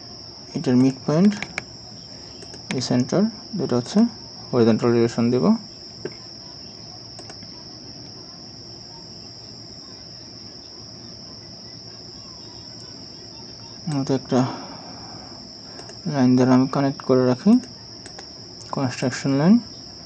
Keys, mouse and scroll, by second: 3.2 right click, 4.0 shift+click, 4.7 shift+click, 6.0 typing, 6.3 Return, 13.6 right click, 18.6 scroll down 1.